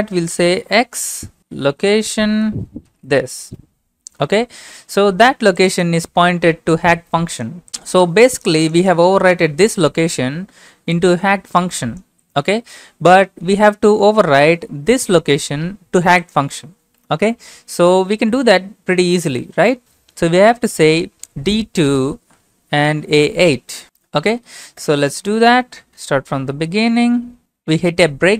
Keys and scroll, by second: 0.4-2.2 typing, 2.9 ctrl+v, 3.6 Return, 17.6 Up, 18.1 Up, 18.8 Up, 19.4 Left, 19.9 Left, 20.0-20.8 Left, 21.1 Left, 21.3 Left, 21.5 Left, 21.8 Left, 22.2 Right, 22.5 Left, 22.8 Left, 23.6-24.3 typing, 24.8 Return, 25.7-26.5 typing.